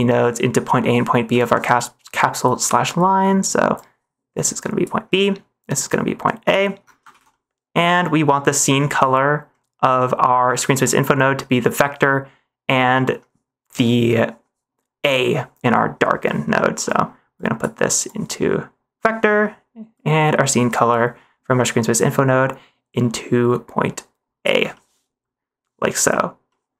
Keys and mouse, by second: 1.2 middle click, 1.7 middle click, 2.4 click, 2.9 middle click, 3.7 click, 3.9-4.8 drag, 5.2 middle click, 5.7 drag, 5.9-6.4 drag, 7.1 ctrl+s, 7.2 middle click, 8.9 middle click, 10.8 middle click, 16.3 middle click, 16.9 middle click, 17.3 click, 17.5 click, 18.0-18.9 drag, 19.2 middle click, 19.9-24.4 drag, 24.8 middle click, 26.4 middle click.